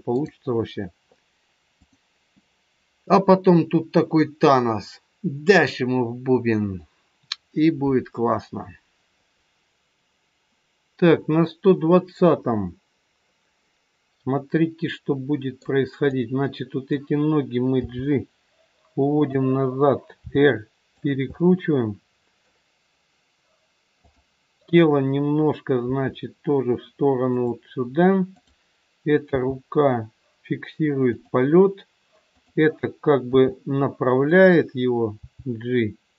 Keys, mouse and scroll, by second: 0.0 click, 13.5 middle click, 16.0 click, 17.7 g, 20.3 r, 21.2 middle click, 24.1 click, 25.8 r, 28.2 click, 29.2 g, 32.3 click, 33.3 r, 35.0 g.